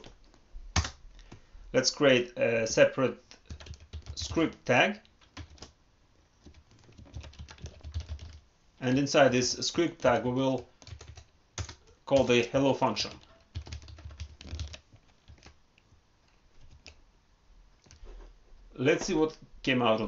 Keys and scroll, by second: 9.9 ctrl+Left, 15.1 ctrl+s, 16.6 alt+Tab.